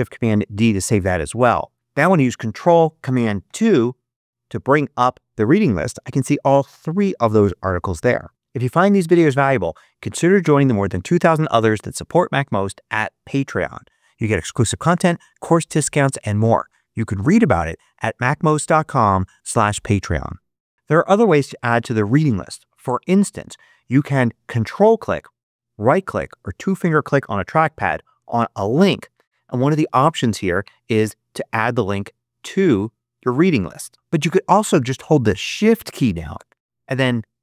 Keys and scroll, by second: 3.4 ctrl+super+2.